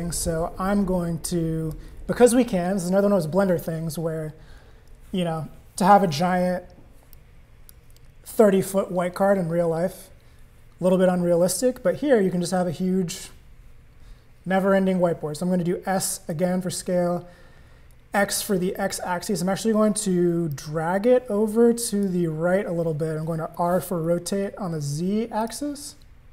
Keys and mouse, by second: 1.2 click, 7.1-7.7 drag, 16.3 s, 20.5-22.1 drag, 23.5 r.